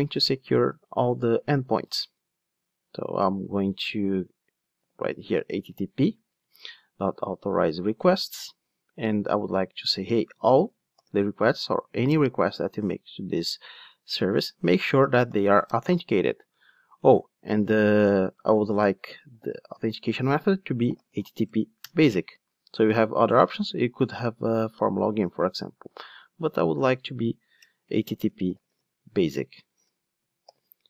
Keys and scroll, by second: 7.9 Return, 12.2 Return, 18.7 super+z, 19.7 Return, 22.7 super+z, 25.5 super+z, 26.4 super+z.